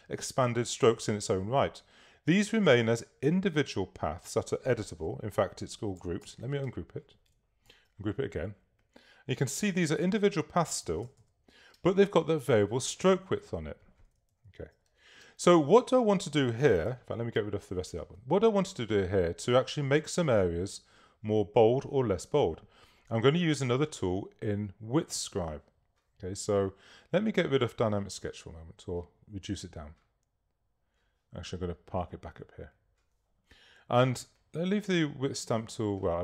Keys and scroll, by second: 6.3 shift+super+g, 12.0 super+space, 14.4 super+-, 15.5 super+space.